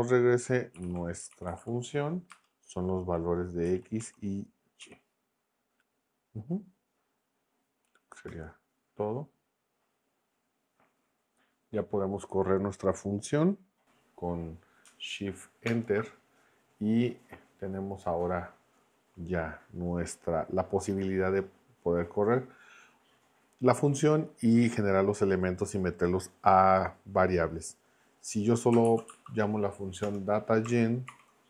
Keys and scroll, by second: 0.5-2.3 typing, 3.7 x, 4.0 ,, 4.8 y, 8.3 Return, 15.7 shift+Return, 28.6-29.6 typing, 30.0 Return, 31.1 shift+9.